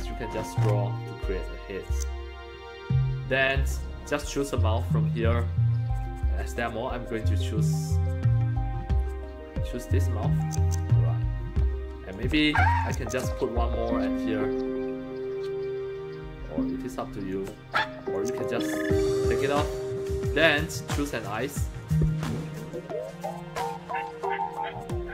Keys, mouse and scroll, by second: 0.4 scroll down 1, 1.9-3.5 drag, 4.7 scroll down 3, 10.4-12.1 drag, 12.8-17.3 drag, 18.1 click, 21.8 click.